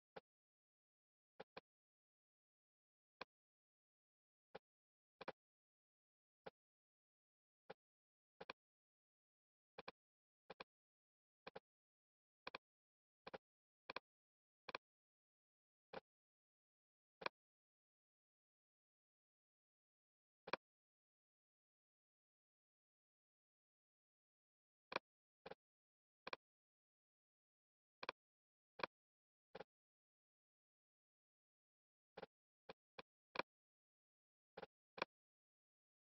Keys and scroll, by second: 23.2 super+z.